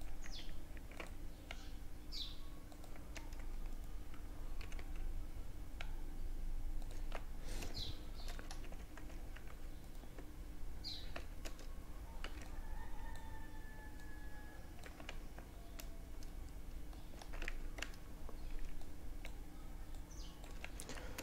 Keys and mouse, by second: 2.1 a, 2.7 click, 2.9-4.7 right drag, 3.6 g, 5.9 Tab, 6.8-10.7 drag, 7.4 Tab, 7.8 Tab, 8.1 Tab, 10.1 z, 10.4 a, 11.2 b, 12.9-14.7 drag, 13.8 z, 14.2 Tab, 14.7-15.2 middle drag, 15.3 middle drag, 16.2 Tab, 16.4 z, 16.8 a, 17.5 b, 18.9-20.7 drag, 19.4 z, 19.7 Tab, 20.7 middle click.